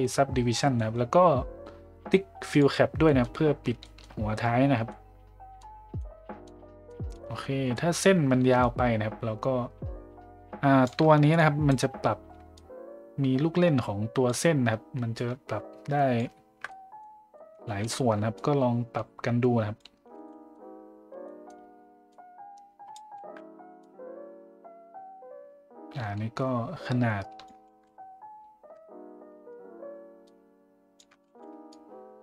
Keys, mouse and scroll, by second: 0.8 middle click, 2.5 click, 3.0 middle drag, 3.8 shift+middle drag, 4.9-5.6 middle drag, 6.0-6.4 middle drag, 6.9 middle click, 7.7 middle click, 8.7-10.9 shift+drag, 11.4 click, 12.6-14.3 shift+drag, 15.2-16.2 drag, 16.7 middle click, 17.3 ctrl+middle click, 17.7 ctrl+z, 18.3-19.9 shift+drag, 20.2 ctrl+z, 20.2 ctrl+middle click, 21.2 middle drag, 22.1 click, 23.2 ctrl+z, 23.9-27.5 drag, 27.7 ctrl+z, 30.2 shift+click, 31.3 ctrl+z, 31.7-32.2 shift+drag.